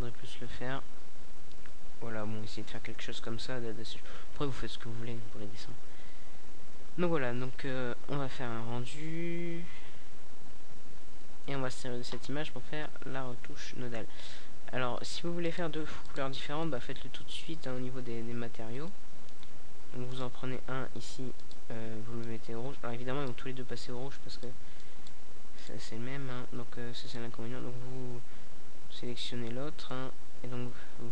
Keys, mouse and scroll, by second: 0.4-1.2 right drag, 1.4-4.0 right drag, 4.0 middle click, 4.4-5.3 drag, 5.3-6.8 right drag, 9.3-10.4 right drag, 12.7-15.1 right drag, 15.1-16.7 middle drag, 15.3-15.6 scroll up 2, 17.9-21.0 drag, 21.0 middle click, 22.1-27.2 drag.